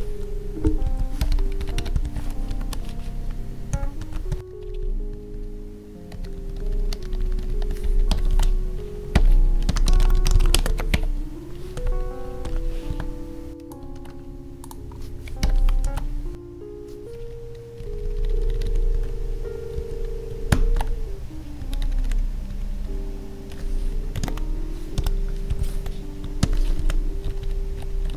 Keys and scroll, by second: 4.4 Right, 4.5 Down, 8.3 ctrl+s, 10.5 space, 12.9 Tab, 13.9 ctrl+c, 15.5 ctrl+v, 17.8 Up, 18.9 ctrl+`, 20.5 ctrl+Tab, 21.6 Up, 26.8 ctrl+s, 27.3 ctrl+shift+Right.